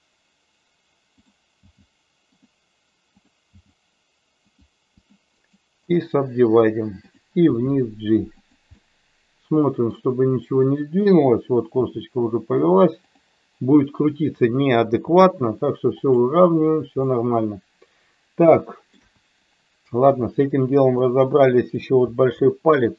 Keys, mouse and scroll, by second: 1.1 click, 1.7 g, 2.3 click, 3.2 click, 3.4 g, 4.4 click, 4.8 click, 5.5 right click, 7.5 g, 8.3 click, 8.8-9.9 middle drag, 11.1 click, 11.8 g, 14.3 click, 14.9 g, 16.1 click, 17.1-18.8 middle drag, 18.9 KP_1, 20.9 middle click, 22.3 shift+middle click.